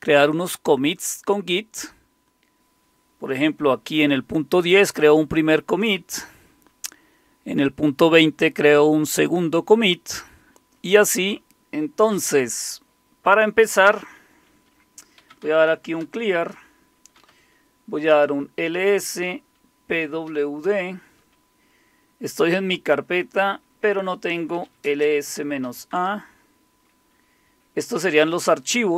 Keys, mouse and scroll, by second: 11.5 Left, 13.3-15.2 drag, 14.9-17.6 typing, 18.1 Return, 19.0-20.8 typing, 24.4-25.9 typing.